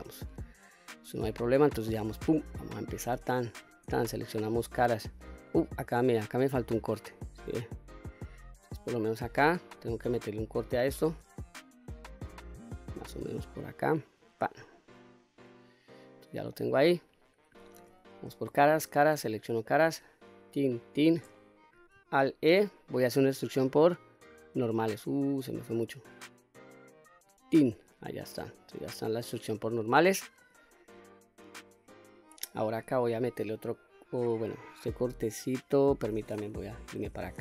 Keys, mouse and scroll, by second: 2.1 click, 2.5 middle click, 3.4 shift+click, 3.9-5.2 middle drag, 5.5 middle click, 6.7-8.7 middle drag, 8.8-9.7 scroll down 1, 9.7-10.0 scroll up 1, 10.7 ctrl+r, 14.2 click, 14.7-16.6 middle drag, 16.9 click, 17.8 3, 18.2 click, 18.7 shift+click, 19.2-20.5 middle drag, 20.4 shift+click, 20.9 shift+click, 21.3 middle click, 22.2 alt+e, 27.3 click, 27.7-29.2 middle drag, 29.7 middle click, 30.4 click, 30.9 middle click, 36.6 KP_3.